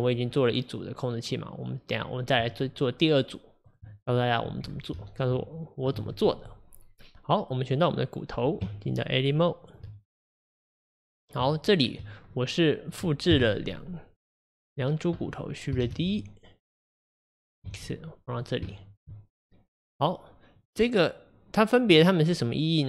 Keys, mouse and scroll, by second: 3.8 Tab, 5.1-7.7 shift+middle drag, 7.7 click, 9.8 Tab, 10.5 click, 12.3-13.3 middle drag, 13.3 KP_1, 14.8 click, 15.9 shift+d, 18.8-20.0 shift+middle drag, 20.0 click, 20.6 click, 22.0 click.